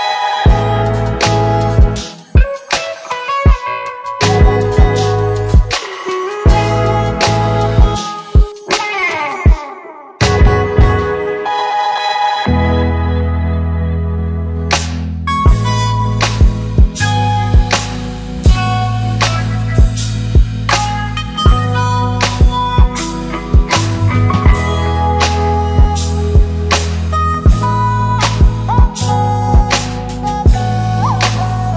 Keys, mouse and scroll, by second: 3.7 click, 4.1 Left, 5.8 Return, 8.0-9.0 click, 14.7 space, 18.9 click, 20.5 click, 23.4 click, 25.1 click, 26.9 Return, 28.1-28.8 click, 28.9 space.